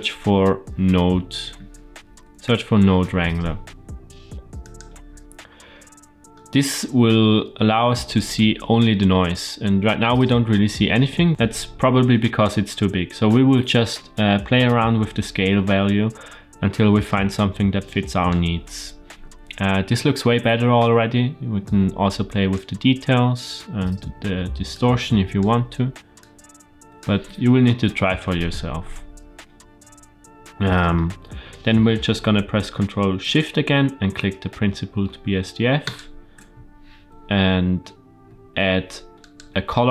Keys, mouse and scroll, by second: 8.2-9.2 shift+middle drag, 10.8-11.3 scroll up 1, 11.3 ctrl+z, 13.2-18.2 drag, 21.5 click, 24.6 click, 26.1 click, 27.8 ctrl+z, 28.7-29.1 scroll down 3, 29.7-30.8 scroll down 1, 30.8 scroll down 1, 30.9 middle click, 35.8 ctrl+shift+click, 38.2 shift+a.